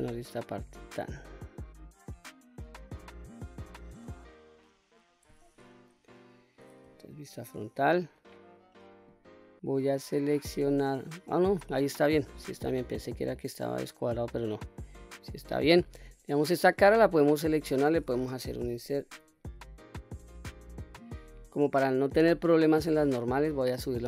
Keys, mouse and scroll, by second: 2.9 middle click, 3.7 click, 4.6 middle click, 6.9 KP_1, 7.7-8.6 scroll up 3, 10.0 middle click, 11.4-12.4 scroll down 2, 12.4 q, 12.9-13.4 scroll down 1, 13.4-15.2 middle drag, 15.5 middle click, 16.5 click, 17.2 middle click, 18.7 i, 22.7 click, 23.1-23.4 middle drag.